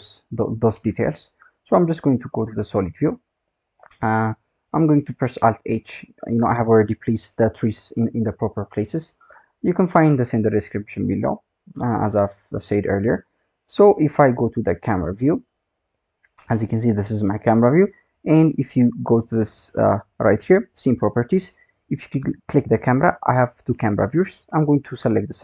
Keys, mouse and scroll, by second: 2.4 click, 3.6-4.6 scroll down 7, 4.6-5.7 scroll up 3, 5.7 alt+h, 6.4-7.5 scroll up 5, 7.5-8.2 scroll up 10, 8.2 click, 8.8-9.8 scroll up 3, 9.8 click, 10.4-11.3 scroll down 20, 12.2-12.7 drag, 13.1 scroll down 4, 13.4-15.0 scroll up 8, 15.0 KP_0, 18.5 click, 22.1-25.4 drag.